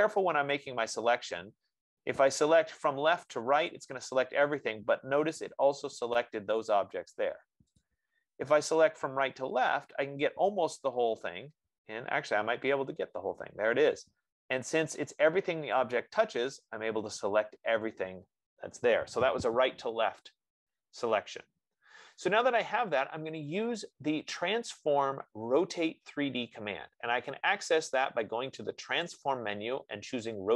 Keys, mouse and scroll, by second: 3.9 click, 8.2 click, 11.5 F15, 16.0 click, 16.9-21.1 drag, 29.4-30.5 drag.